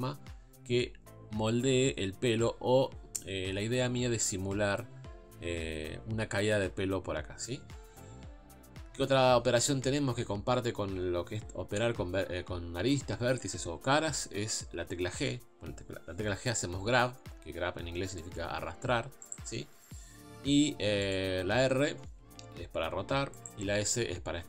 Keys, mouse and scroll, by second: 15.2 g, 21.0-22.3 drag, 22.3 r, 23.8 s.